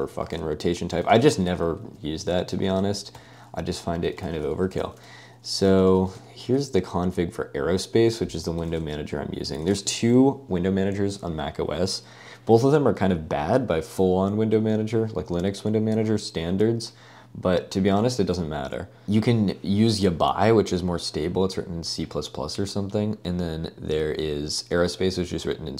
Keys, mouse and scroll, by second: 1.1 ctrl+space, 1.8 Escape, 2.5 typing, 2.9 Escape, 3.2 ctrl+l, 3.9-6.4 typing, 8.8 super+space, 9.7 super+space.